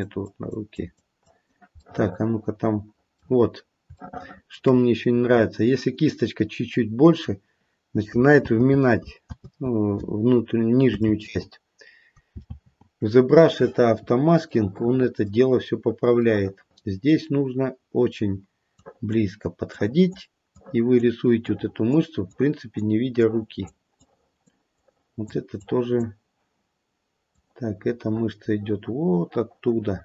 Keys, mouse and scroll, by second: 0.1 click, 0.7 click, 1.2 click, 1.8 middle click, 2.3 middle click, 3.4-3.8 scroll up 2, 3.9 shift+middle click, 4.1 shift+middle click, 4.6-5.3 scroll up 1, 5.3-6.6 scroll up 1, 8.7 ctrl+z, 9.5 ctrl+z, 11.3 ctrl+z, 13.2 ctrl+z, 14.1-14.5 scroll down 1, 14.5 middle click, 15.6-16.2 scroll up 1, 16.2 middle click, 17.3-18.6 scroll up 2, 18.8 click, 19.7 click, 20.5 click, 21.4 click, 22.3 click, 23.1 click, 24.0 click, 24.7 click, 25.6 click, 27.3 click.